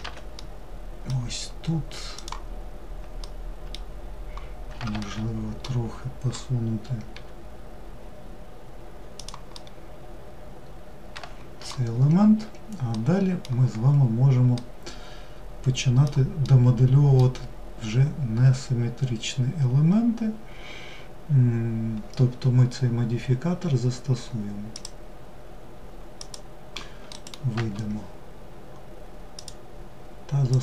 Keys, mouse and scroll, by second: 1.6-2.6 drag, 2.6-6.6 middle drag, 6.6 g, 9.0-11.3 middle drag, 11.3-12.4 scroll down 4, 12.4-13.2 middle drag, 13.2-14.0 scroll down 1, 14.0-19.1 middle drag, 24.2-26.7 drag, 28.8-30.6 drag.